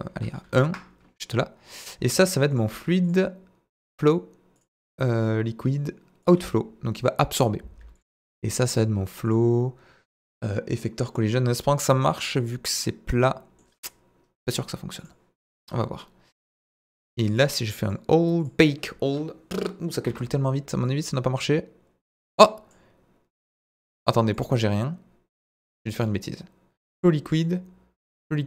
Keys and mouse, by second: 3.0-3.8 drag, 4.5 click, 5.7-6.2 drag, 7.9 click, 8.7 click, 9.2-10.4 drag, 11.2-11.6 middle drag, 12.3-12.7 middle drag, 13.2-13.5 middle drag, 14.9 click, 17.4-18.0 drag, 18.5-20.1 drag, 20.8-22.7 drag, 23.4 middle click, 23.9 click, 24.7-25.3 middle drag, 25.9 click, 27.3 click.